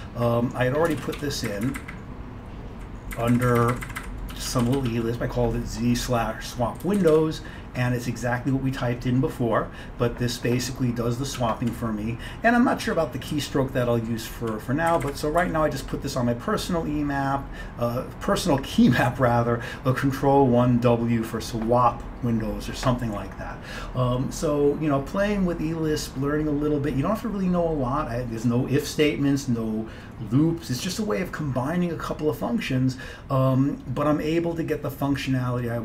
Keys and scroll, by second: 1.0 ctrl+x, 1.3 1, 1.6 Up, 1.8 Up, 1.9 Up, 2.0 Up, 2.7-4.1 Up, 4.4 Down, 4.6 Down, 4.7 Down, 4.9 Down, 11.4 Down, 12.9 Page_Down, 13.4 Down, 13.9 Down, 14.1-14.8 Down, 15.0 Up, 15.1 Up, 15.5 Left.